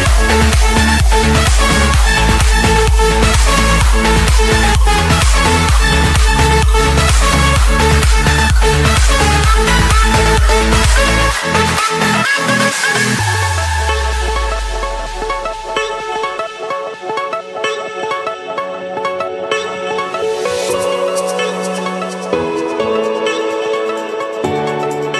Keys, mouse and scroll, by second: 0.0-2.0 typing, 0.9 Return, 2.3 Escape, 3.9 click, 4.1 click, 4.7 click, 4.7-5.7 scroll, 6.2 click, 6.9 click, 8.1 scroll, 9.3 click, 9.8 middle click, 9.8 middle click, 10.5 middle click, 11.4 right click, 13.3-14.4 drag, 14.7-15.8 drag, 16.0 scroll down 2, 16.2-18.0 middle drag, 18.0 Escape, 19.9-20.4 typing, 21.3 Return, 22.2 Return, 23.2 Return.